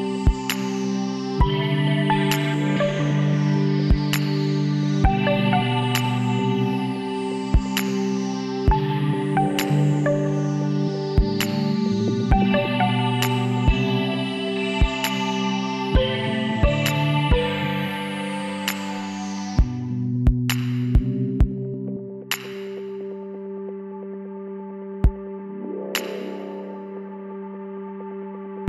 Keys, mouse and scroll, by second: 0.0 KP_3, 0.4 middle click, 2.3 middle click, 2.4 ctrl+r, 4.0-5.4 drag, 5.7-6.9 middle drag, 6.9-8.7 drag, 8.1 right click, 8.7-9.8 right drag, 9.4 b, 15.3 x, 19.2-21.2 drag, 20.4 b, 22.7 x, 24.0 middle click, 24.9 KP_1, 25.6 KP_3, 26.8 z, 28.2 b.